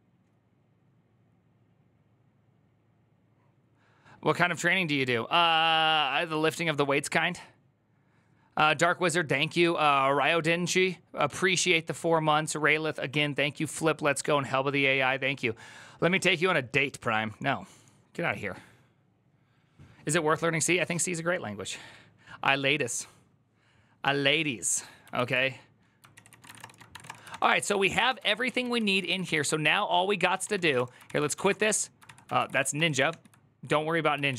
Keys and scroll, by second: 25.0 alt+{, 25.9 ctrl+c, 26.0 ctrl+c, 26.1-28.3 typing, 28.5 ctrl+u, 30.0-32.6 typing, 31.8 ctrl+c, 32.9 ctrl+h, 34.0-34.3 typing.